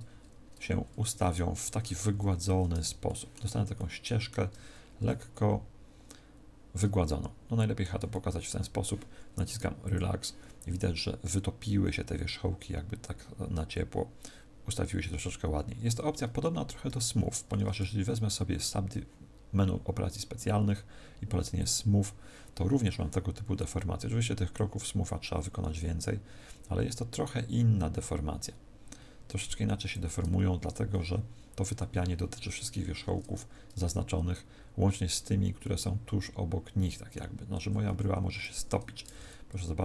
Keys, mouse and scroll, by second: 0.9 middle click, 2.0 KP_1, 3.0 shift+middle click, 3.7 shift+middle click, 5.0 middle click, 8.0 shift+middle click, 9.7 click, 16.8 ctrl+z, 17.7 w, 24.5 click, 35.5 middle click, 39.1 z.